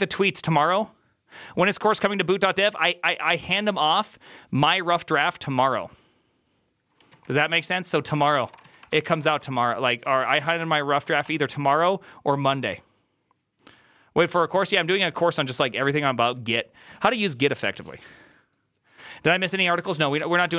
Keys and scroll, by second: 8.0 alt+{, 8.0 ctrl+c, 8.1-11.5 typing, 9.7 ctrl+c, 19.5-20.3 typing, 20.5 Return.